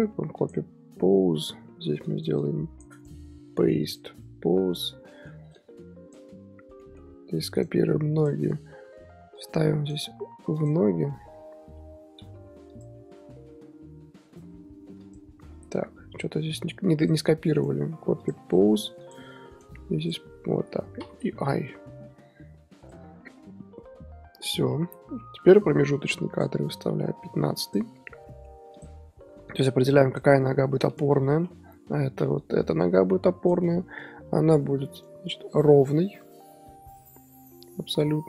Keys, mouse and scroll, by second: 2.0 click, 3.0-4.8 right drag, 4.8 i, 5.0-5.5 middle drag, 5.5 click, 6.8 middle drag, 7.0 z, 7.5-9.3 right drag, 9.3-10.6 drag, 9.8-11.7 right drag, 11.7 i, 12.7-15.5 drag, 15.5 a, 16.5-20.1 drag, 17.5-19.0 right drag, 19.5-21.0 right drag, 21.0 i, 22.8-24.7 drag, 24.7-25.3 middle drag, 25.3 KP_3, 26.3-28.0 drag, 28.0 scroll up 1, 28.2-28.7 middle drag, 28.7 click, 29.5-31.0 drag, 31.3 KP_3, 32.4-33.8 drag, 33.8-34.2 scroll up 2, 34.2 r, 35.5 click, 35.9 r.